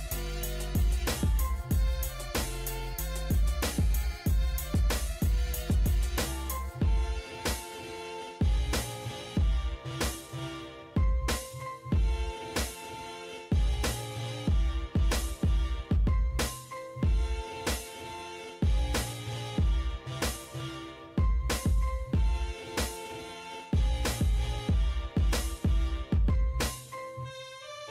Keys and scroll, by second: 2.5-3.5 typing, 6.8 Escape, 9.9-11.5 typing, 11.7 Escape, 13.2 Escape, 14.5-15.4 typing, 20.8 e, 20.9 space.